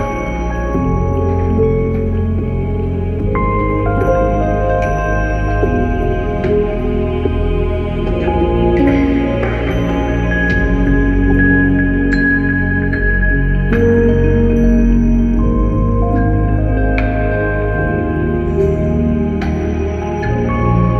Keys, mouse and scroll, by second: 0.1 ctrl+e, 1.1 shift+w, 1.4 click, 3.4 space, 3.4 click, 3.6 space, 4.0 click, 6.9 click, 8.7 space, 8.9 click, 9.0 space, 9.5 click, 12.5 ctrl+shift+i, 12.9 alt+s, 13.0 alt+m, 13.0 alt+c, 14.9 click, 16.9 click, 17.2-20.9 typing.